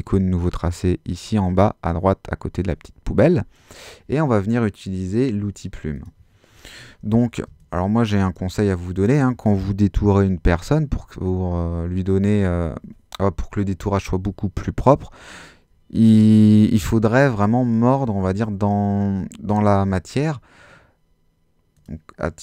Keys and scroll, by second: 7.4 space, 16.4 super++.